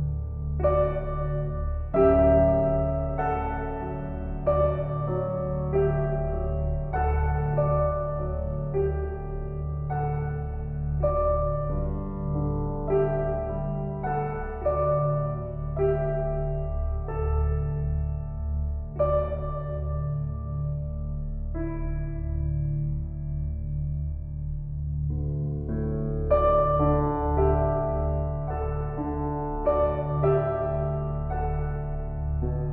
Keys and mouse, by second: 3.5-5.1 alt+drag, 5.1 Tab, 6.1 Tab, 7.2-17.6 ctrl+alt+drag, 18.5 ctrl+shift+z, 19.1 ctrl+shift+z, 19.7 ctrl+shift+z, 22.0-23.0 drag, 23.0 1, 23.5 ctrl+alt+click, 23.8-24.1 ctrl+alt+shift+drag, 24.7-25.5 ctrl+alt+drag, 29.0 click.